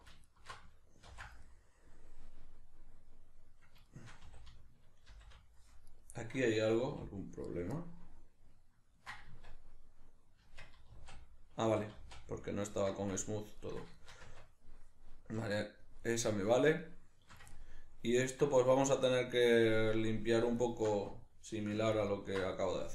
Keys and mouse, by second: 0.3 alt+shift+right click, 1.1 ctrl+x, 4.3 a, 5.1 shift+n, 5.9 right click, 6.9 g, 7.6 right click, 7.8 ctrl+middle click, 9.3 Tab, 13.3 ctrl+middle click, 14.0 shift+middle click, 14.3 Tab, 15.5 shift+middle click, 17.5-20.6 ctrl+middle drag, 20.6 alt+right click, 21.9 ctrl+alt+right click.